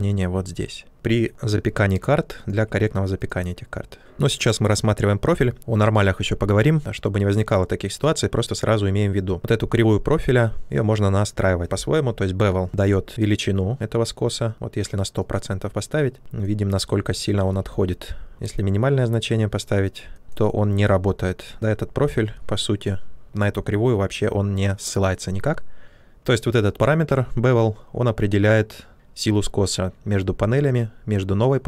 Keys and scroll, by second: 17.5 ctrl+z, 18.3 shift+f.